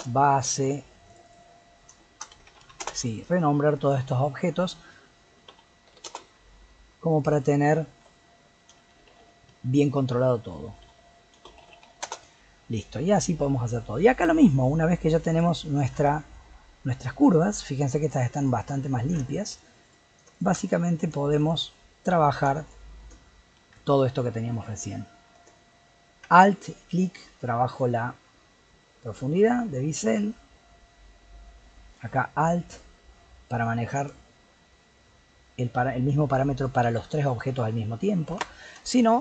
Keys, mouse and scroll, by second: 1.3-3.7 drag, 3.8-7.0 drag, 7.2 click, 7.3-10.5 drag, 13.1 click, 13.6-13.9 scroll up 1, 13.9-14.3 middle drag, 14.3 click, 15.3 click, 15.8 scroll up 1, 16.0 Tab, 16.4 middle click, 16.9 Tab, 17.5 click, 18.1 shift+click, 18.4 shift+click, 19.3 shift+click, 19.8 click, 20.3 click, 20.7 shift+click, 22.7 shift+click, 26.7-29.8 alt+drag, 32.8-35.9 alt+drag.